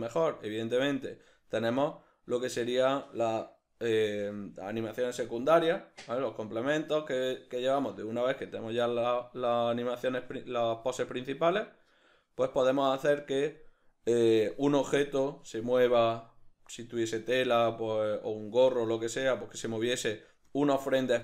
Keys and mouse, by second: 1.6 Escape, 10.8-21.2 drag.